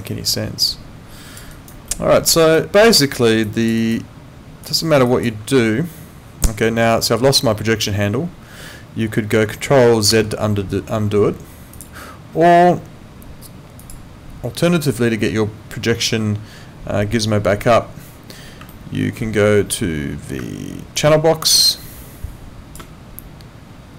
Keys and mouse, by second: 0.1 alt+click, 1.5 alt+right click, 1.9 alt+middle click, 2.6 alt+click, 3.1 alt+middle click, 3.5 alt+click, 3.8 alt+right click, 4.6 click, 5.1 alt+click, 10.1 ctrl+z, 11.7 click, 13.8 click, 18.7 alt+middle click, 20.4 space, 21.0 click, 22.8 space.